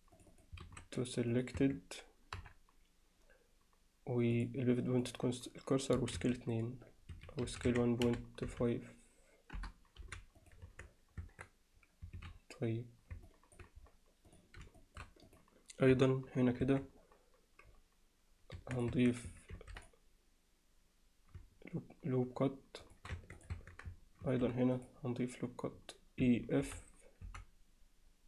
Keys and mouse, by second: 0.3 click, 0.7 shift+s, 1.6 Tab, 2.4 KP_7, 4.5-5.1 drag, 6.0 s, 7.5 s, 10.7 Tab, 11.2 Tab, 12.2 alt+a, 13.3 alt+middle drag, 14.3 click, 14.8 alt+shift+middle drag, 15.3 click, 15.9 KP_1, 16.7 Tab, 18.6 Tab, 18.8 click, 18.9 Tab, 19.5 ctrl+r, 23.2 Tab, 23.4 click, 23.6 Tab, 24.3 ctrl+r.